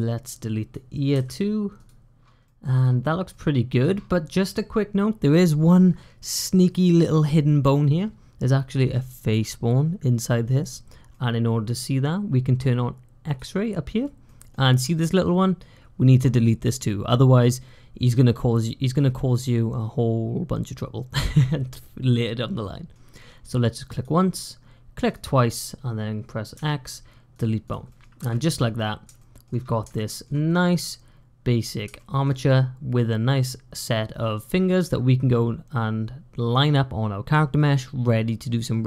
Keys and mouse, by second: 1.0 x, 2.3 middle click, 3.2 middle click, 3.6 click, 11.0 middle click, 13.1 click, 14.1 middle click, 22.5 click, 26.4 x, 27.7 click, 28.0 `, 29.0 shift+middle click, 29.8 shift+middle click, 31.8 shift+click, 32.0 shift+middle click, 33.7 middle click.